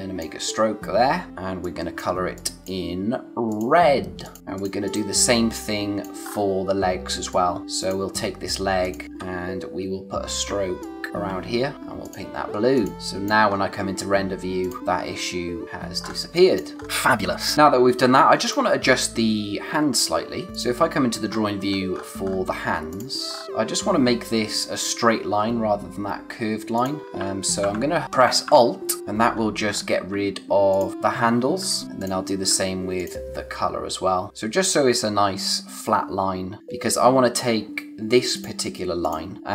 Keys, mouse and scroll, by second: 4.4 scroll down 1, 4.5 click, 5.4 space, 5.5 click, 5.9 space, 6.2-7.0 scroll up 1, 7.0 space, 7.3 click, 7.5 space, 7.8 click, 9.9-10.4 scroll up 1, 10.8 shift+click, 13.2 space, 13.4-13.9 scroll up 1, 14.6 click, 15.6-16.1 scroll down 1, 16.1 space, 16.3 click, 16.6 space, 16.7 scroll up 1, 16.8 space, 17.5-18.2 scroll up 1, 18.4 click, 20.1-20.5 scroll down 1, 20.5 click, 21.2-21.9 scroll down 1, 21.9-22.9 scroll up 1, 22.9 click, 23.3-24.0 scroll up 1, 27.0 scroll up 1, 29.0 alt+click, 29.2-29.7 scroll down 1, 29.7-30.0 scroll up 1, 30.7 alt+click, 30.9-31.2 scroll down 1, 31.8 scroll up 1, 32.0 click, 32.9 alt+click, 35.8-36.5 scroll down 1, 38.3 click.